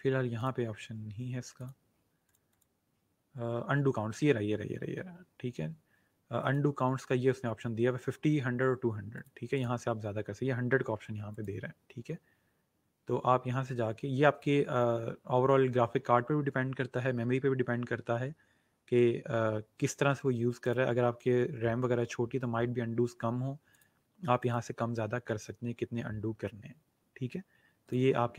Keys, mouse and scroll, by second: 6.3 click, 20.5 click, 23.6 click, 27.8 click.